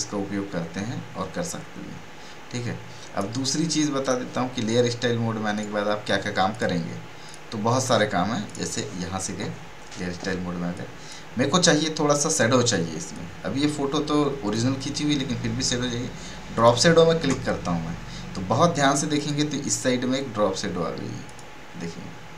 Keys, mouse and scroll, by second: 4.0 click, 5.5 right click, 6.5 click, 6.5 click, 7.7 right click, 8.4 click, 10.7-16.5 drag, 16.5 click, 18.7 click.